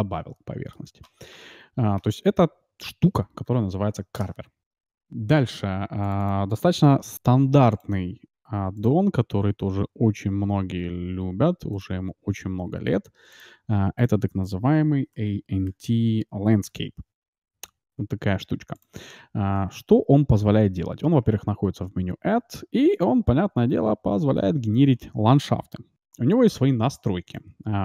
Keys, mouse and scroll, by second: 1.3 Tab, 2.0 Tab, 3.1 a, 3.4 a, 3.9 Delete, 7.7-9.3 drag, 19.7 shift+a, 21.3 shift+a, 24.3 KP_Decimal, 25.0-26.9 middle drag, 26.0 F6.